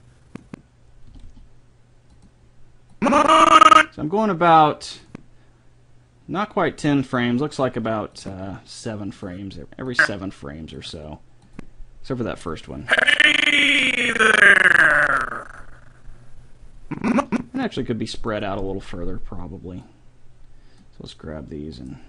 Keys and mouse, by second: 1.1 r, 3.1-4.8 drag, 5.1-6.8 drag, 6.9-8.2 drag, 9.0 click, 9.4 click, 11.9-14.1 drag, 18.3-21.6 drag.